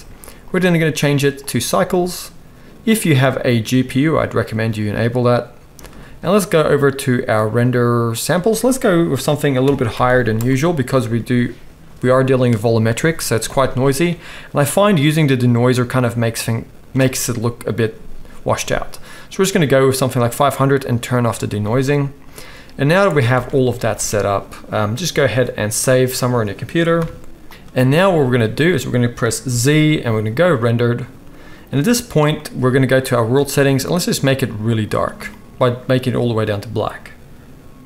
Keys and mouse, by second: 0.4-21.0 middle drag, 10.0 0, 21.0-23.3 right drag, 23.4 alt+a, 23.8 ctrl+s, 26.8-28.0 right drag, 29.5 z, 30.5-37.8 right drag, 33.2 click, 33.2 middle click, 33.9 click, 33.9 middle click.